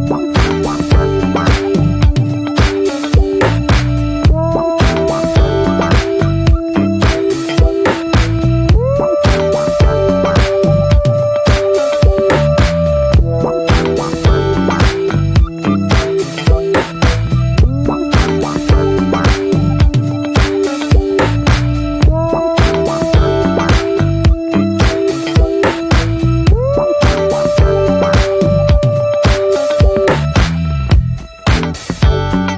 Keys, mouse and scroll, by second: 0.1 click, 1.4 scroll down 1, 1.9 s, 3.7-4.1 drag, 4.1 ctrl+s, 4.3-4.7 drag, 4.7 Tab, 8.2 click, 8.4 scroll down 2, 8.6 ctrl+s, 8.8-9.2 scroll up 2, 9.2-9.5 drag, 9.5 shift+middle click, 9.9 Tab, 13.9 drag, 14.1 scroll down 1, 14.3-14.8 shift+middle drag, 14.8 ctrl+s, 15.0 scroll down 1, 15.3-15.7 shift+middle drag, 15.7 scroll up 2, 16.0 ctrl+s, 16.1 click, 16.9 `, 17.5 shift+middle click, 17.7-18.2 scroll down 2, 18.2 /, 18.5 middle click, 18.7 Tab, 19.1-20.2 middle drag, 20.2 3, 20.2-22.0 drag, 22.0 x, 22.6 click, 22.8 a, 23.5 right click, 24.1 scroll down 1, 24.4-25.7 middle drag, 26.0 alt+middle click, 27.0 2, 27.1-28.5 drag, 28.5 right click, 29.0 a, 29.5 right click, 30.0 scroll down 2, 30.2 middle click, 30.4 ctrl+s, 31.2 /, 31.5-32.0 middle drag, 32.0 Tab, 32.1 click, 32.2 scroll down 1, 32.4-32.5 middle drag.